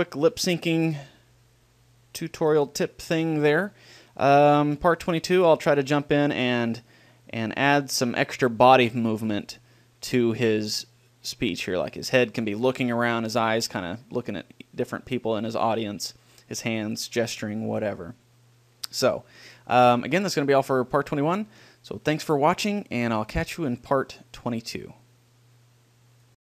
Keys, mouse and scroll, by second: 3.5-8.3 middle drag, 19.8-23.5 middle drag, 24.7 middle click.